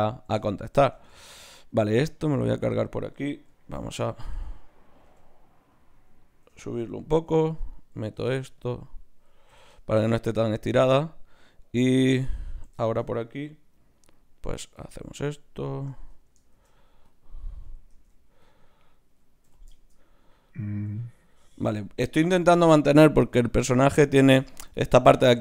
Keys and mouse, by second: 0.9 ctrl+Tab, 1.7-3.4 drag, 1.9 x, 3.6 ctrl+Tab, 4.3-5.5 drag, 5.0 g, 7.1 ctrl+r, 8.1 ctrl+Tab, 9.5 f, 10.7 ctrl+Tab, 14.4 d, 14.5-16.5 drag, 16.5 shift+q, 17.9 ctrl+Tab, 18.8 click, 19.4 f.